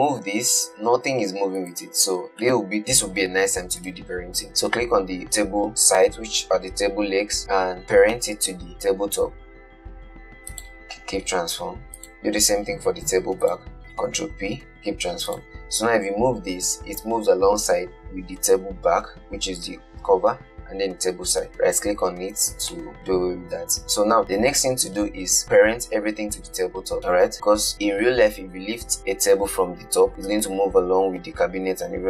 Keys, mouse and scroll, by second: 0.6 g, 2.7-4.1 middle drag, 4.1 click, 8.4 shift+click, 8.5 ctrl+p, 12.3 click, 13.7 shift+click, 13.8 ctrl+p, 15.6 click, 16.6 g, 23.0-24.2 shift+middle drag.